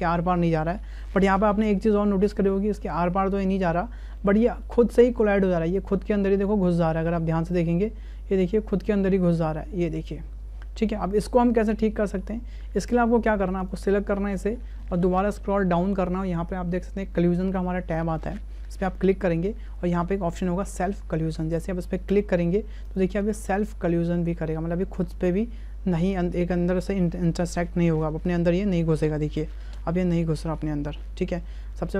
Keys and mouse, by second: 1.7 space, 2.3-3.5 middle drag, 4.2 shift+middle drag, 4.6-5.0 middle drag, 5.7-6.1 shift+middle drag, 7.1-10.8 middle drag, 12.0 middle click, 13.6 right click, 18.3 right click, 22.1 right click, 22.9 right click, 23.3 space, 29.6 space, 30.4-31.3 middle drag.